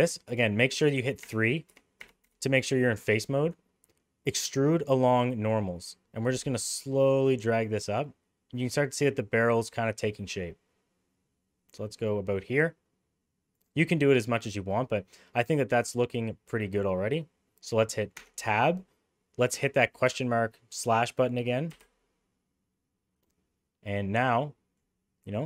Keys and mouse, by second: 0.3-2.2 typing, 3.5-13.7 right drag, 14.3-16.8 middle drag, 18.2 Tab, 21.7 /, 23.2-24.8 middle drag.